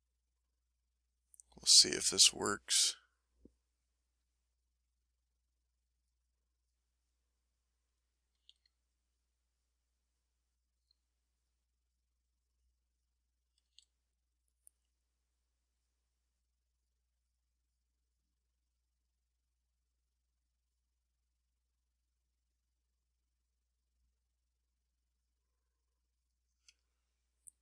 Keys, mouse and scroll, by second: 0.0 shift+middle click, 0.9 shift+click, 1.7 click, 2.2 click, 2.6-6.2 drag, 6.5 click, 6.9 click, 7.3 middle click, 7.7-8.3 scroll up 1, 8.3-8.7 scroll up 1, 8.3 s, 8.7 click, 9.5-11.1 drag, 11.2 click, 11.8 click, 12.3 click, 12.8 click, 13.6 s, 14.3 click, 14.8 click, 15.3 click, 16.2 click, 17.1 middle click, 17.6 middle click, 18.0 middle click, 18.6-21.0 middle drag, 24.3 middle click, 25.5 middle click, 26.2 click, 26.9-27.6 ctrl+middle drag.